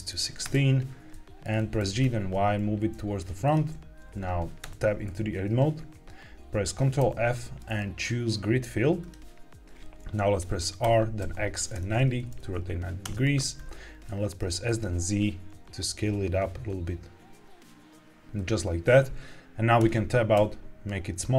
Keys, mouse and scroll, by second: 1.0 middle click, 1.4 scroll down 2, 1.7 g, 1.9 y, 3.3 click, 4.5 Tab, 6.9 ctrl+f, 10.8 r, 11.1 x, 11.7 KP_9, 11.8 KP_0, 12.9 KP_Enter, 14.0 middle click, 14.5 s, 14.6 z, 18.3 click, 19.7 Tab, 20.3 s.